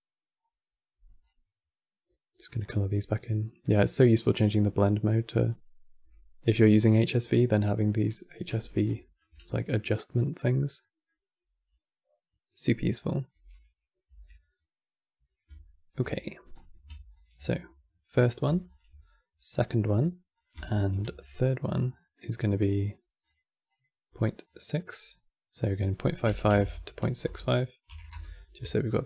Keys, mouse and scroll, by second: 0.1-1.4 scroll up 3, 1.4-3.0 drag, 3.0-4.0 middle drag, 4.0-7.0 drag, 8.4 scroll down 2, 8.7-13.0 shift+middle drag, 13.0 n, 13.8 Tab, 15.3 shift+middle click, 16.2-16.9 scroll up 4, 16.9 ctrl+shift+click, 18.4 ctrl+shift+click, 19.5-20.0 middle drag, 20.0 click, 20.5 ctrl+shift+d, 21.7-22.9 middle drag, 22.9 click, 23.4 click, 24.1 click, 24.4 middle click, 24.7-25.4 scroll up 6, 25.4 click, 26.3 KP_5, 28.7 ctrl+shift+click.